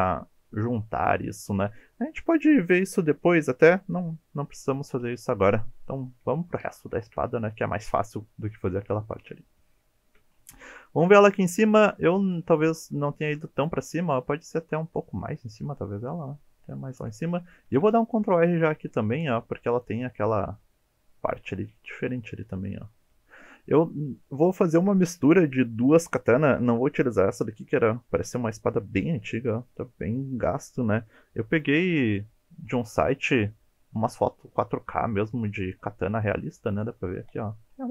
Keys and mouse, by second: 4.9 KP_1, 6.4 shift+middle click, 9.9 shift+click, 11.0 shift+click, 11.8 alt+z, 12.3 click, 13.7 g, 13.8 z, 14.9 click, 17.7 ctrl+r, 19.7 click, 33.9 g, 34.1 z, 35.7 click.